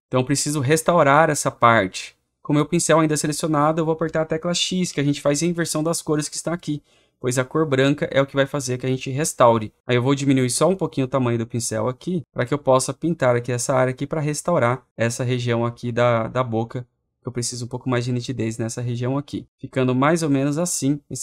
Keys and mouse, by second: 4.7 x, 10.7 right click, 19.4 right click, 20.3 click.